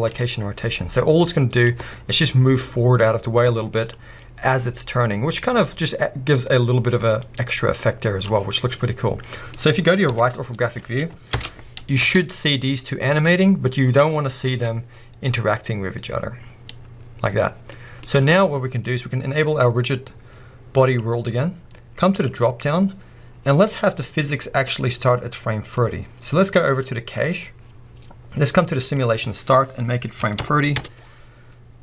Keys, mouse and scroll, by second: 1.0-8.8 drag, 1.8 space, 3.5 space, 8.4-8.8 scroll down 1, 8.8-12.0 middle drag, 10.1 KP_3, 10.6 scroll up 1, 11.3 shift+Left, 12.0 space, 18.1 space, 20.8-31.8 drag, 27.6-28.8 scroll down 2, 30.8 Return.